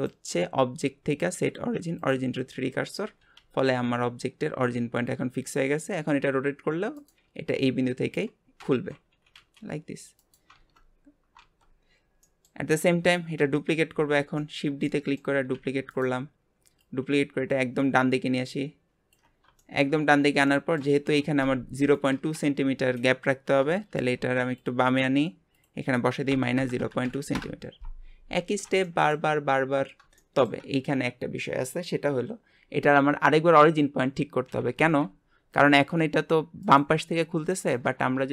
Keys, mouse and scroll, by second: 2.4 scroll down 3, 3.0 r, 9.1 r, 11.6 r, 11.8 scroll down 1, 12.2-13.4 middle drag, 13.4 KP_1, 14.4-15.5 shift+middle drag, 15.5 shift+d, 16.8 click, 19.6 shift+middle click, 20.0 scroll up 4, 20.4-23.5 shift+middle drag, 23.7 shift+middle click, 24.6 click, 25.5-28.6 drag, 28.8-29.8 shift+middle drag, 29.8 scroll down 2, 30.2-33.3 shift+middle drag, 34.5 r.